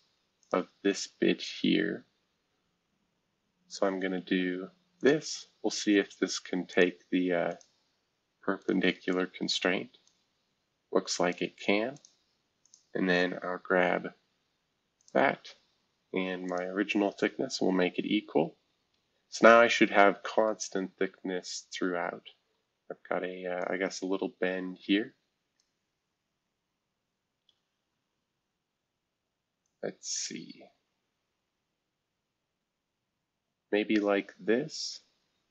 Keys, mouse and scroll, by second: 0.4 click, 1.9 scroll up 1, 3.7 click, 5.0 click, 5.8 Escape, 6.7 click, 7.5 shift+click, 8.6 click, 10.0-11.3 drag, 11.9 click, 12.6 click, 13.2 scroll down 1, 13.8 scroll up 1, 15.0 click, 15.6-16.4 scroll up 1, 16.5 shift+click, 17.0 e, 17.8-18.9 scroll down 2, 18.9 scroll up 1, 19.6-20.2 scroll down 3, 20.2-20.8 scroll up 3, 21.3 scroll down 1, 22.4 scroll up 1, 23.6-25.6 drag, 26.0 scroll down 1, 26.6 scroll down 2, 27.2 scroll up 2, 29.6-35.5 drag.